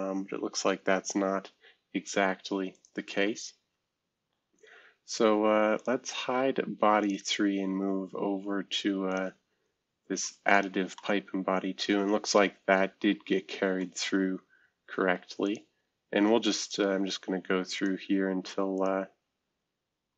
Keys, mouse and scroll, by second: 1.0-2.5 scroll up 2, 2.7 click, 5.7 click, 6.1 space, 7.0 click, 7.4 space, 8.4 space, 9.1 click, 9.5 space, 10.5 click, 10.9-14.8 middle drag, 16.6-17.9 drag, 16.9 space, 18.1 space, 18.7 click, 19.0 space, 19.9 space.